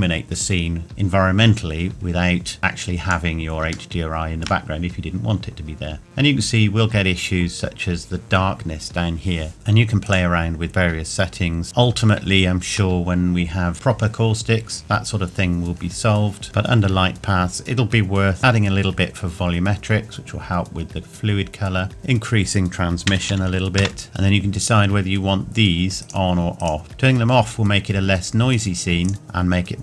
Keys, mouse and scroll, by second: 2.6 click, 3.9 shift+middle click, 5.7 scroll up 1, 9.5 shift+middle click, 10.0 click, 15.7-16.4 scroll down 1, 21.9 click, 26.0 click, 28.5 click.